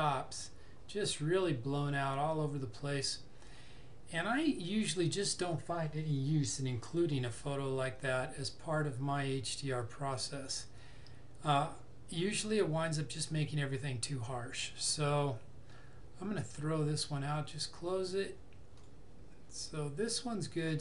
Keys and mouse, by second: 17.6 click.